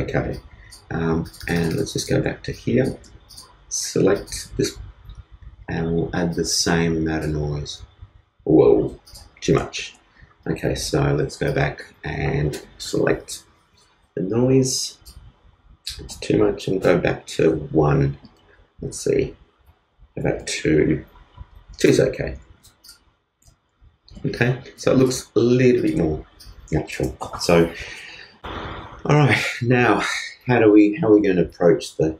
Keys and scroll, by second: 9.8 super+z.